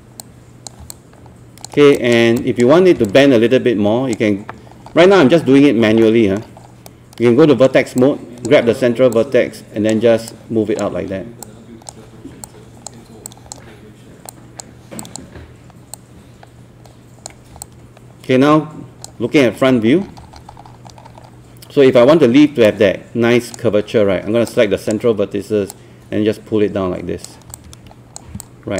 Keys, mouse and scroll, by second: 0.9 alt+click, 2.4 alt+click, 3.1 click, 4.7 scroll up 1, 6.0 alt+middle click, 6.5 scroll up 1, 6.9 right click, 8.0-19.5 drag, 19.5 scroll up 1, 22.6-28.3 drag, 28.4 alt+click.